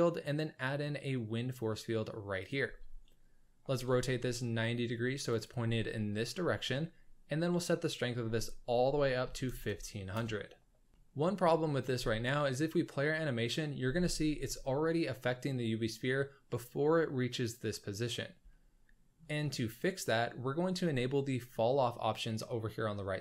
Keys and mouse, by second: 3.6 r, 7.8-10.1 drag, 9.6 KP_0, 10.9-11.4 shift+middle drag, 11.9 space, 13.8 space, 18.5-19.2 shift+middle drag.